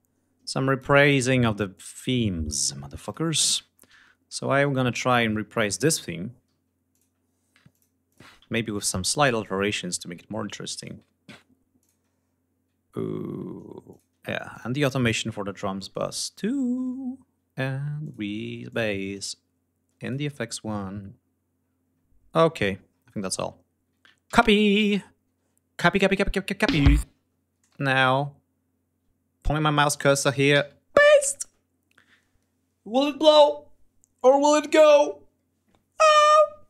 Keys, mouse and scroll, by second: 1.6 ctrl+click, 2.9 ctrl+click, 3.6-5.6 ctrl+scroll up 7, 5.8 scroll down 2, 6.8 ctrl+click, 7.6 click, 8.0 click, 8.3 ctrl+scroll up 2, 9.3 ctrl+click, 9.9 ctrl+scroll up 3, 10.7 ctrl+click, 10.9 ctrl+scroll up 2, 11.7 ctrl+click, 12.1 ctrl+scroll up 2, 13.8 ctrl+click, 14.4 ctrl+click, 15.3-16.6 scroll down 6, 17.9 ctrl+click, 18.6 ctrl+click, 19.9 ctrl+click, 20.4-22.0 ctrl+scroll down 10, 22.3-22.7 scroll up 2, 22.8-23.2 scroll down 2, 23.3 ctrl+scroll up 2, 23.4 ctrl+scroll down 2, 24.2 ctrl+c, 24.4-25.1 ctrl+scroll up 5, 25.8 click, 26.1 scroll down 2, 26.6 space, 27.0 ctrl+scroll up 2, 27.5 ctrl+space, 27.7 ctrl+scroll up 1, 30.4 ctrl+v.